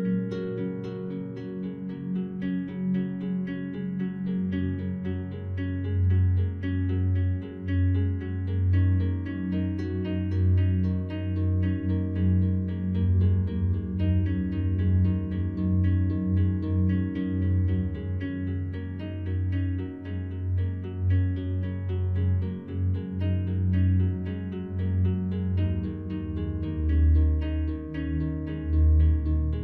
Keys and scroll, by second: 21.3 ctrl+z.